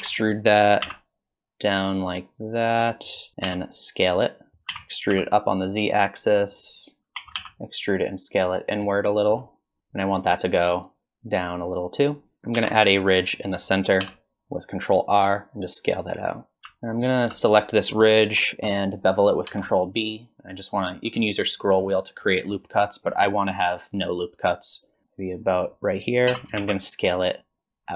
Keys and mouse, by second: 0.0 e, 3.5 s, 4.7 e, 7.2 e, 8.9 middle click, 9.8 KP_1, 10.5-12.4 drag, 12.4 ctrl+2, 12.6 ctrl+r, 14.0 s, 16.2 middle click, 16.6 KP_1, 16.9 alt+click, 19.5 ctrl+b, 26.3 s.